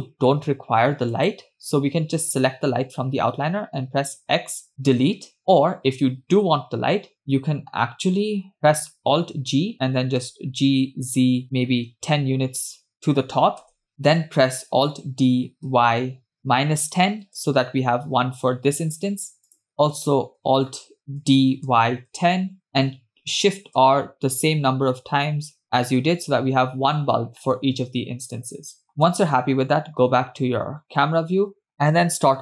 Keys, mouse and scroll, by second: 1.1 click, 4.3 x, 8.6 click, 9.4 alt+g, 10.6 g, 13.9 KP_0, 15.1 alt+d, 19.7 click, 21.7 alt+d, 25.0 shift+r, 26.1 shift+r, 28.0-29.0 middle drag, 29.6 KP_0.